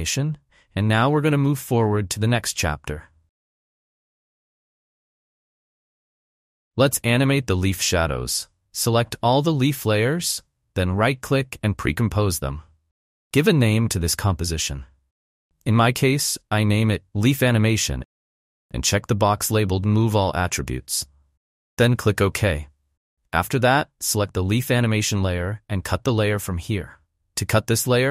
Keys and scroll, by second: 0.0 space, 6.8 space, 13.8-17.4 typing, 26.6 alt+[.